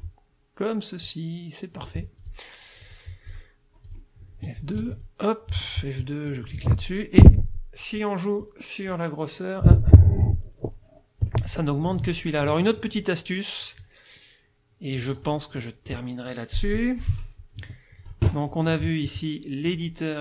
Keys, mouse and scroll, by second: 1.0-2.0 drag, 2.2 click, 2.8 click, 3.3 click, 3.9 click, 4.2 F2, 4.8 F1, 5.0 click, 5.5 F2, 6.3 click, 8.0 click, 8.9-11.4 drag, 13.8-15.4 drag, 15.6 click, 17.6 F1, 18.0 click, 19.7 click.